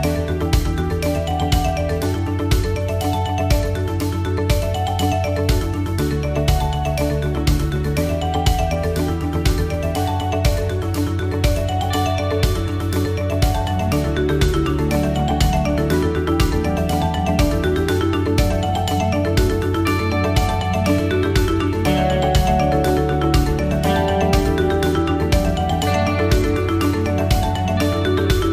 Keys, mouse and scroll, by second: 3.1 click, 3.6 click, 7.1 click, 7.8-20.8 click, 21.3 click, 24.0 click, 24.4 click, 26.8 click, 28.1 click.